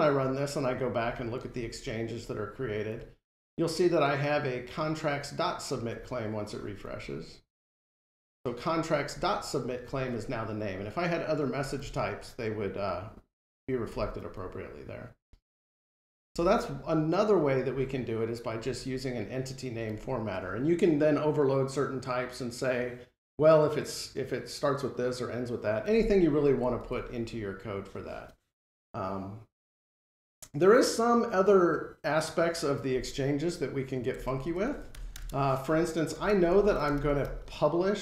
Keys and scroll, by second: 26.7 ctrl+Tab.